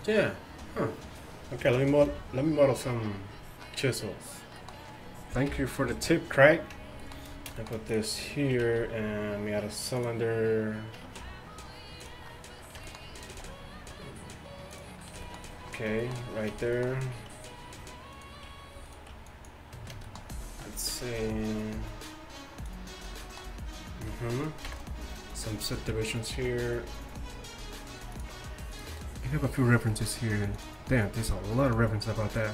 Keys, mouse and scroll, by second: 5.5 KP_1, 7.9-9.9 drag, 8.7 shift+a, 11.0 Tab, 11.3 s, 13.4 s, 18.2-21.0 right drag, 19.3-21.2 drag, 22.1-24.7 drag, 24.7 KP_1, 26.4 ctrl+r.